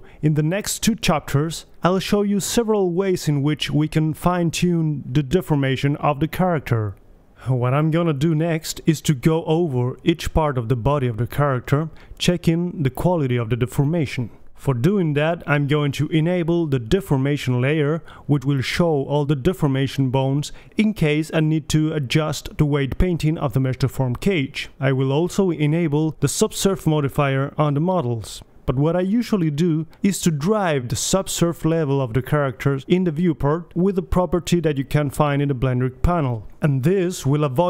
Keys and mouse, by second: 2.3-6.0 right drag, 5.0-8.7 drag, 14.2-16.9 drag, 17.1-19.0 drag, 19.0-19.7 middle drag, 21.5 middle click, 21.7 KP_3, 23.0-24.0 middle drag, 25.1-27.2 right drag, 27.2-28.6 drag, 28.0 KP_3, 29.1-31.1 right drag, 31.1-31.7 drag, 31.1 KP_1, 35.8-37.1 drag.